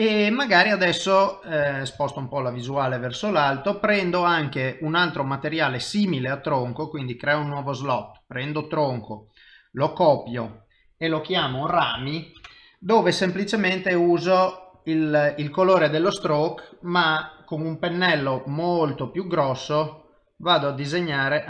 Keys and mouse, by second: 2.0 shift+middle click, 6.2 click, 7.3 click, 10.5 click, 14.8 click, 17.8 i, 18.2 f, 19.5 click, 20.4 click, 21.1 f.